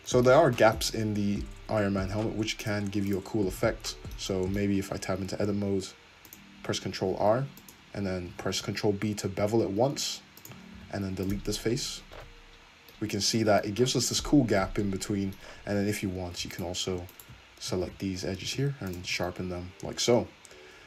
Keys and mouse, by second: 0.0-2.6 shift+middle drag, 2.6 click, 3.6 Tab, 3.6-5.3 middle drag, 5.4 ctrl+r, 8.3 ctrl+b, 10.8 x, 11.8 Tab, 12.2 Tab, 15.6 Tab, 16.0 2, 16.6 alt+click, 17.1 alt+shift+click, 17.8 shift+e, 19.1 Tab.